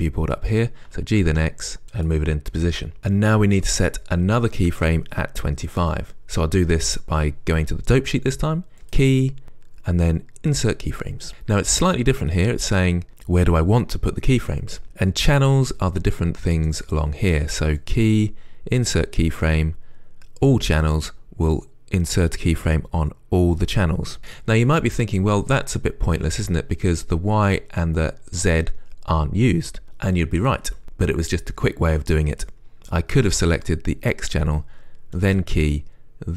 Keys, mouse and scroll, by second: 21.1-34.0 drag.